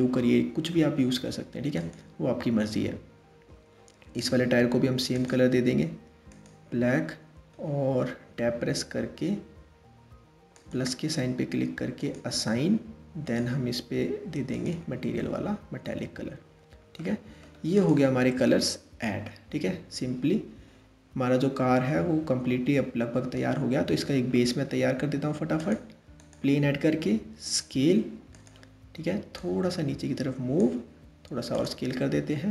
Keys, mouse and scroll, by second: 1.4 click, 4.8-7.3 drag, 7.3-7.9 scroll up 1, 7.9 Tab, 10.2-12.9 drag, 14.4 click, 14.8 middle click, 15.5 Tab, 16.0-16.6 scroll down 1, 16.6-17.4 middle drag, 17.4 click, 18.1-21.1 middle drag, 23.0-24.0 scroll down 5, 24.0-24.5 middle drag, 24.5 shift+a, 26.9 s, 29.0 click, 30.4 s, 31.5-32.5 middle drag.